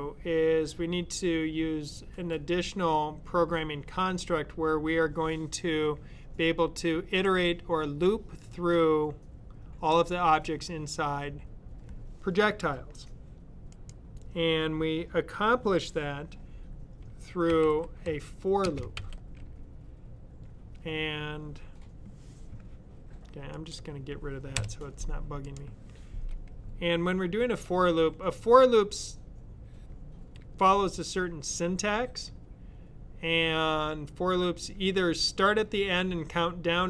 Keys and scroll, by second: 17.2-18.8 typing.